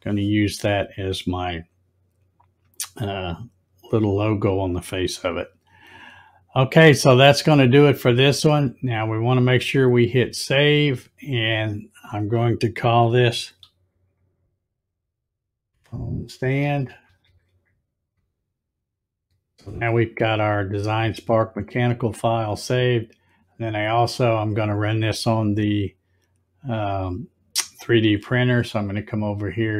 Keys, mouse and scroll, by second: 9.0 click, 15.2-17.8 typing.